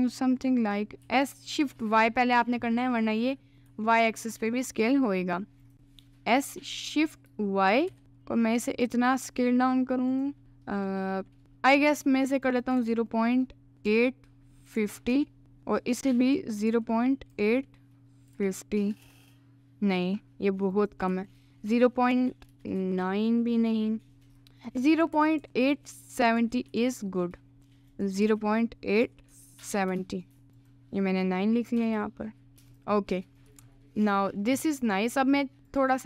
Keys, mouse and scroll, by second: 1.0 s, 2.8-3.8 middle drag, 3.8 s, 5.7 click, 6.3 s, 10.1 click, 12.5-15.2 drag, 16.2-19.1 drag, 20.7-22.6 drag, 24.7-27.6 drag, 27.9-30.0 drag, 30.6-32.5 drag, 33.0 middle click, 33.5 Tab, 33.8 middle click, 34.8 Tab, 34.9 middle click, 35.7 click.